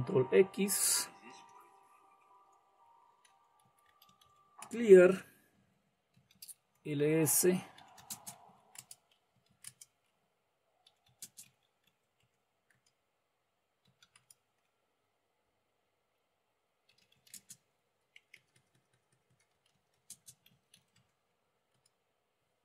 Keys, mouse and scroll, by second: 0.8 ctrl+x, 2.9-4.7 typing, 5.9-14.4 typing, 16.5-21.6 typing.